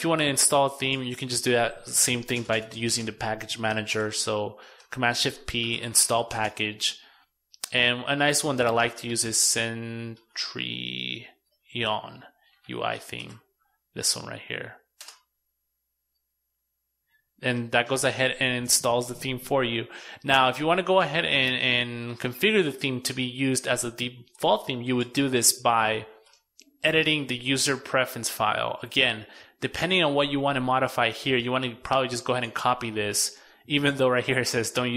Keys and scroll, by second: 2.8 shift+super+o, 3.8 shift+super+p, 31.7 super+c.